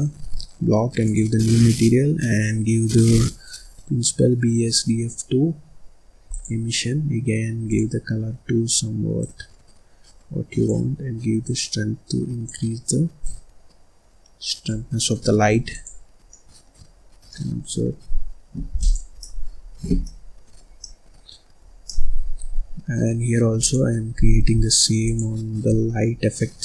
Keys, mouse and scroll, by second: 1.0-6.2 drag, 7.6 click, 13.2-15.9 drag, 16.2 scroll down 1, 16.3 middle click, 16.9-17.2 scroll up 5, 17.2 middle click, 18.1-18.7 scroll up 1, 18.7 click, 19.2-23.5 middle drag, 23.5 click, 25.0 shift+click.